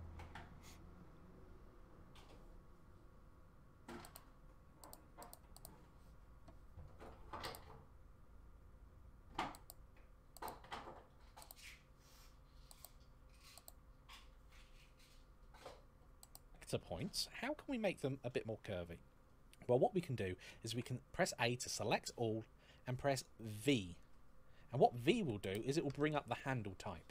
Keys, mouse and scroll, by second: 7.6 shift+middle click, 7.6-9.6 scroll down 1, 10.4 shift+middle click, 12.8 click, 20.4 a, 24.9 v.